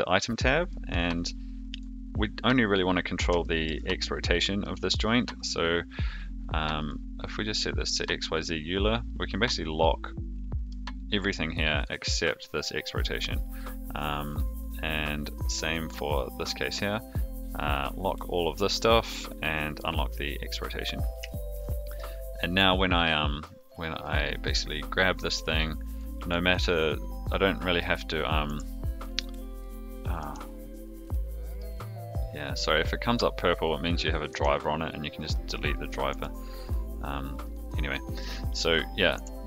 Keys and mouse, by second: 0.7 middle drag, 3.4 shift+middle drag, 4.6-4.9 middle drag, 6.8-8.0 drag, 9.3-10.8 drag, 11.7 click, 16.1-16.9 drag, 17.7-18.5 drag, 19.6 click, 21.2-21.5 shift+middle drag, 21.9 click, 22.5-23.0 drag, 24.9 click, 25.9 click, 26.3 middle click, 27.4 click, 28.4 r, 30.2-35.0 right drag, 35.8 click, 36.1 r, 37.9 middle drag.